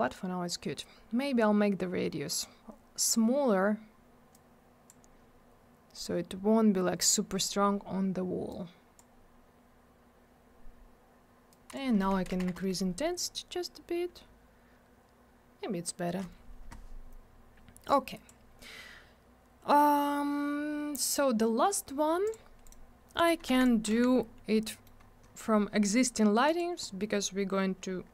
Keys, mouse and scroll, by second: 0.1 click, 4.3 click, 8.5 click, 11.5 click, 12.1 1, 12.4 Return, 17.9 click, 22.3 click, 22.3 click, 22.7 right click, 22.7 double right click, 23.2 right click, 23.3 right click, 23.5 alt+w, 23.9 alt+w, 24.2 scroll down 1, 24.7 middle click, 24.8 middle click, 25.0 scroll up 1, 26.5 click, 26.6 click, 26.9 scroll down 1, 27.5 scroll up 1.